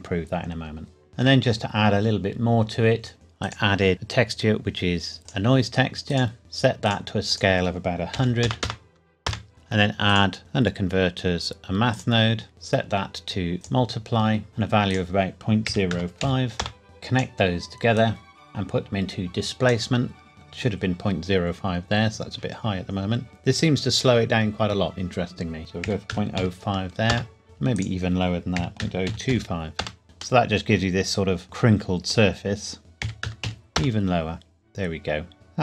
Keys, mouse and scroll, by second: 1.1 shift+middle click, 1.5-3.1 scroll up 1, 3.4 click, 5.2 click, 8.1 KP_1, 8.4 KP_0, 9.3 KP_Enter, 10.1 click, 14.9 click, 15.7 KP_Decimal, 15.9 KP_0, 16.2 KP_5, 16.6 KP_Enter, 16.8 click, 25.6 click, 25.8 KP_Decimal, 26.1 KP_0, 26.4 KP_5, 27.1 KP_Enter, 28.6 KP_Decimal, 28.8 KP_0, 29.1 KP_2, 29.3 KP_5, 29.8 KP_Enter, 30.4 middle click, 32.4-32.8 scroll up 1, 32.8 click, 33.0 KP_Decimal, 33.2 KP_0, 33.4 KP_1, 33.8 KP_Enter, 35.3 middle click.